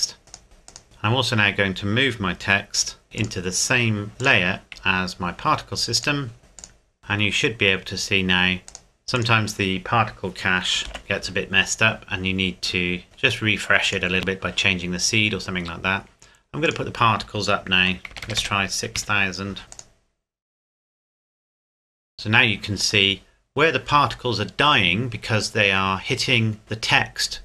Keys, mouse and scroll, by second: 0.2 scroll up 1, 0.4 click, 0.8 middle click, 3.0 m, 3.2 click, 4.8-5.4 scroll up 1, 6.0 click, 6.4 z, 6.6 click, 7.8-8.4 scroll up 1, 8.6 scroll down 1, 8.7 click, 11.0 alt+h, 11.5-13.0 scroll down 1, 13.0-13.8 scroll up 1, 13.8 click, 15.6-16.6 scroll up 1, 16.6 click, 17.8 KP_6, 18.1 KP_0, 19.0 KP_Enter, 19.7 click, 23.2-23.8 scroll up 1.